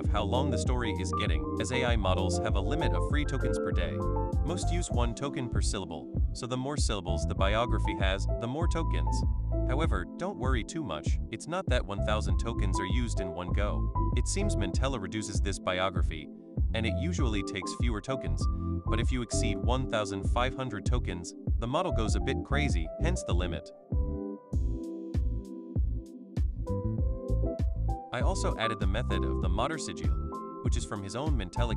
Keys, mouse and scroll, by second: 1.7 click, 6.2 click, 6.3-7.6 typing, 9.2 BackSpace, 10.3-12.0 typing, 13.2 o, 15.5 click, 16.6 click, 18.5 click, 19.0 BackSpace, 21.4 click, 22.1 click.